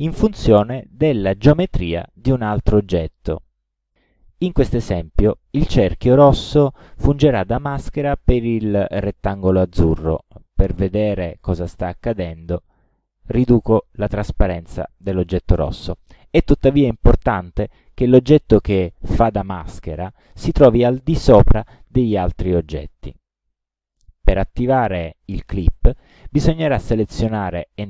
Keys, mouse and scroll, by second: 1.4-2.7 drag, 10.8 click, 12.8 KP_5, 13.3 Return, 24.1 shift+click.